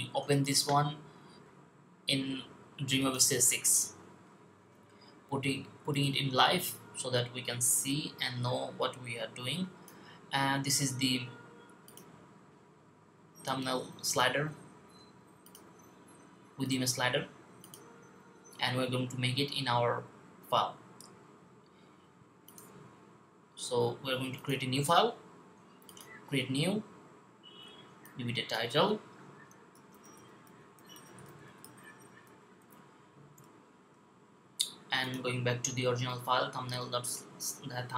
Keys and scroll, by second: 29.6-32.1 typing.